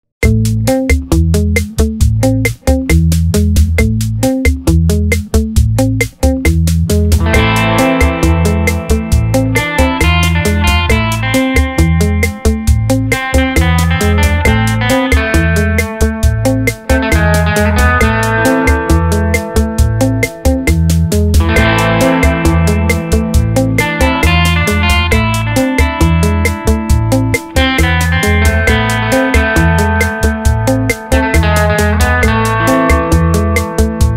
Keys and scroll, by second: 3.1 ctrl+z, 4.5 space, 11.4 Down, 12.1 Down, 17.7 space, 18.8 space, 24.1 space.